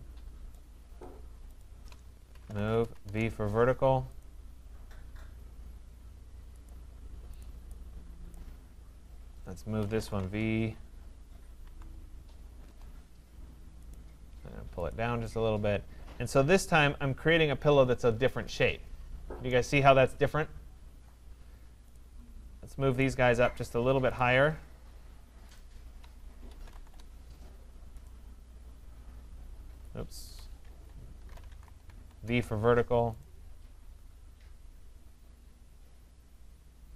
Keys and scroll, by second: 2.6 Return, 10.2 Return, 26.8 Return, 30.2 Escape, 31.6 Return.